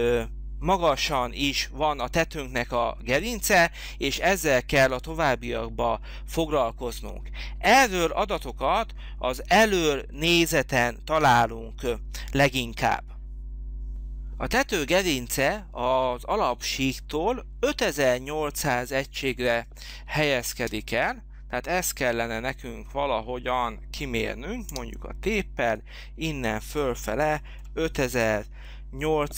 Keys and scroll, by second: 20.5 space, 24.7 t, 27.2 5.